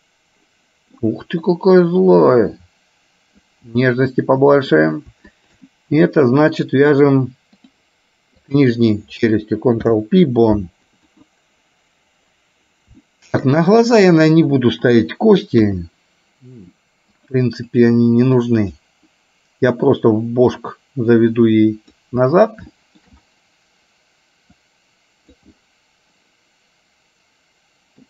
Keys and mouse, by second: 2.1-3.6 drag, 3.8-4.8 middle drag, 5.4 shift+click, 7.1 click, 8.6 click, 9.9 ctrl+p, 13.1 shift+middle click, 14.1 click, 15.7 KP_3, 17.2 click, 18.4 click, 20.2-22.1 drag, 22.8 shift+middle click, 24.8 click, 25.7-28.0 middle drag.